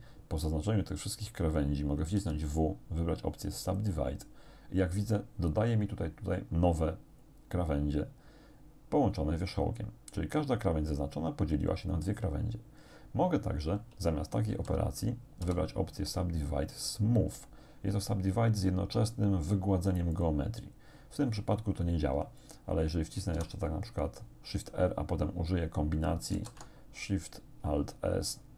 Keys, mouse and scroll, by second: 2.2 w, 3.7 click, 4.9-5.5 scroll up 2, 14.5 ctrl+z, 15.5 w, 20.2 click, 23.4 shift+r, 26.4 alt+shift+s.